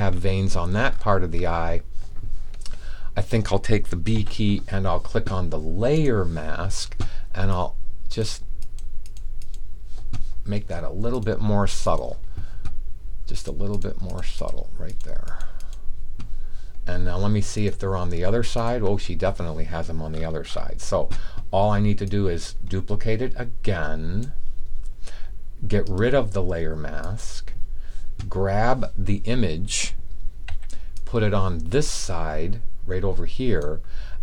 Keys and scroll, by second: 4.0 b, 30.4 v.